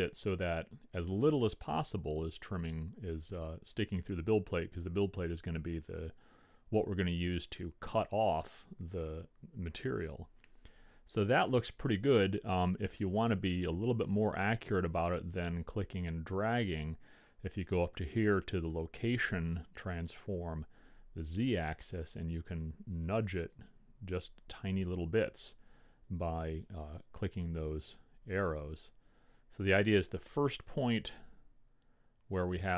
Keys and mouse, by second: 15.0-16.9 drag, 22.7-25.3 drag, 26.8-30.5 drag.